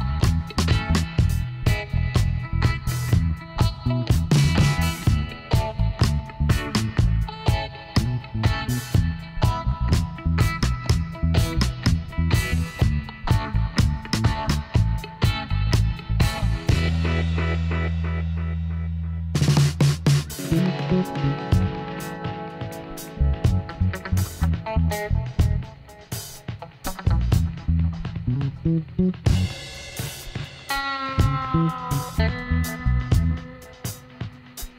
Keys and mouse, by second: 0.1-2.3 middle drag, 3.7-8.4 middle drag, 10.5-14.4 middle drag, 13.8 Tab, 15.8-18.1 drag, 17.3-19.0 right drag, 18.3 shift+d, 19.1 KP_1, 21.7-25.1 middle drag, 25.1 r, 29.1-30.7 right drag, 30.7-33.7 middle drag, 32.6 r.